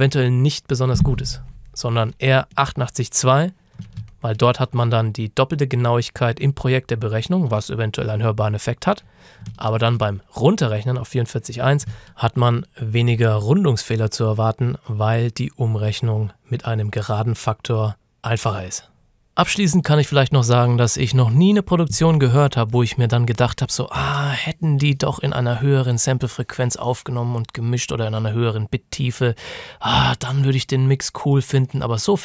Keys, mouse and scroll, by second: 2.6 click, 4.1 ctrl+shift+scroll down 1, 5.6 click, 9.7-11.0 ctrl+shift+scroll up 2, 11.9 F9, 12.0 ctrl+scroll up 1, 12.1 F9.